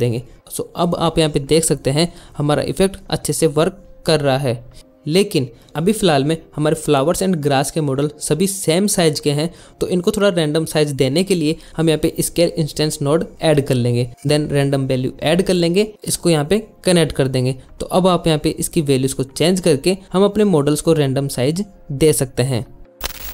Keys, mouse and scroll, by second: 5.5 g, 5.8 s, 6.1 shift+click, 6.5 drag, 6.8 drag, 7.4 click, 7.9 click, 9.3 click, 10.3 g, 10.3 click, 10.4 shift+click, 10.6 shift+a, 13.5 click, 14.0 shift+a, 15.6 click, 16.8 drag, 20.0-21.3 drag, 22.3 middle click.